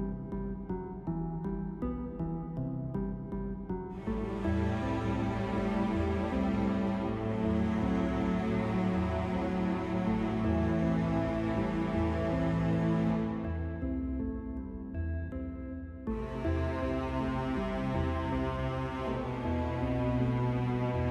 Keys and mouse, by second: 0.9 middle click, 4.8-6.6 right drag, 6.6-8.3 drag, 8.7 ctrl+z, 10.1-12.5 drag, 12.8-17.3 middle drag, 17.3 click.